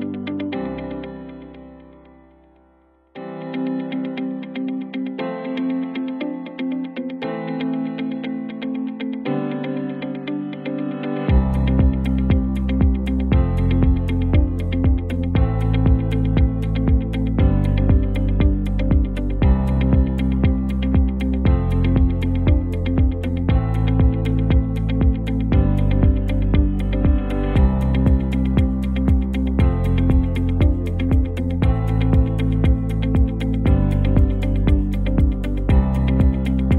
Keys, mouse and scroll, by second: 1.4 ctrl+t, 2.0-3.2 drag, 9.3 t, 9.9 click, 15.5 click, 16.0-17.2 typing, 17.4 ctrl+a, 19.1 click, 19.2-23.8 drag, 26.5 v, 27.3 click, 28.3 ctrl+t, 29.3-30.5 drag, 35.3 click.